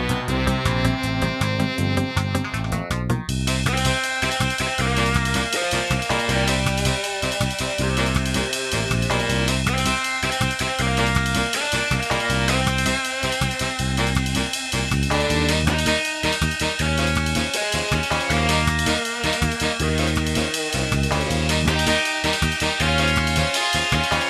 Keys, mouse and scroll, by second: 0.1 scroll up 2, 1.4 shift+a, 2.8 middle click, 3.5 s, 5.3 click, 6.3 click, 8.7 click, 10.1-10.5 scroll down 5, 10.6 middle click, 11.3 g, 12.8 g, 13.8 g, 14.6 g, 15.6 click, 17.4 g, 18.3 g, 19.0 g, 19.7 g, 21.1 click, 22.7 click, 22.8 g, 23.6 g.